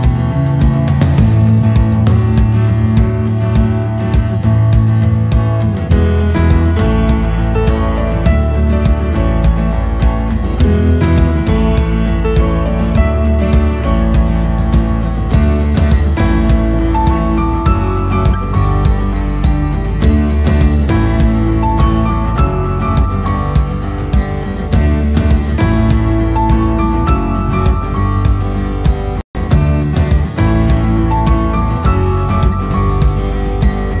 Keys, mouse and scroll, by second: 1.5 click, 1.9 click, 3.1 g, 5.0 middle click, 7.3 s, 8.2 middle click, 9.7 scroll down 1, 12.1 click, 12.5 click, 13.1 c, 13.7 click, 14.1 c, 15.5 middle click, 16.0 middle click, 16.9 c, 18.9 middle click, 19.5 c, 20.4 middle click, 20.9 middle click, 21.3-21.7 scroll down 2, 21.8 i, 26.1-26.9 scroll up 4, 26.3 middle click, 27.3 ctrl+z, 27.6 scroll down 1, 27.8 middle click, 29.1 scroll down 1, 29.9 e, 32.2 middle click.